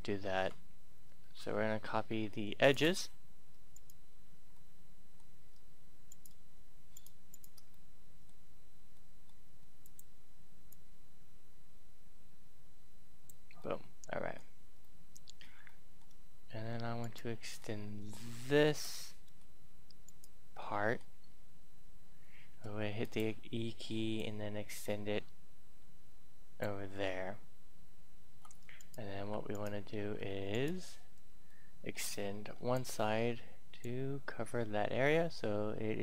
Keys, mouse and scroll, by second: 2.6-3.6 drag, 3.7 right click, 4.5-5.7 middle drag, 6.0 right click, 6.9 shift+right click, 7.3 shift+right click, 7.6 middle click, 8.3 scroll up 1, 8.4-8.9 scroll down 1, 8.9 middle click, 9.7-13.5 drag, 13.5-16.7 middle drag, 16.9 right click, 17.5 middle click, 18.3 shift+middle click, 19.9 right click, 20.5 middle click, 22.5 e, 22.9-26.5 drag, 28.7 right click, 29.1 right click, 31.4 middle click, 32.5 e, 32.6-36.0 drag.